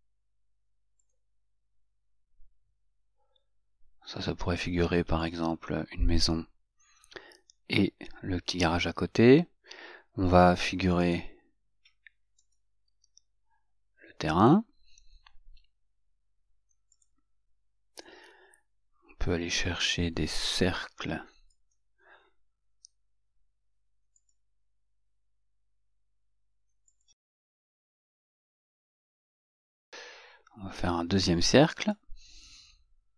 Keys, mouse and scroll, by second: 5.5 click, 11.2 right click, 12.6 click, 21.8 click, 24.5 click, 27.2 click, 29.6 right click, 31.9 click.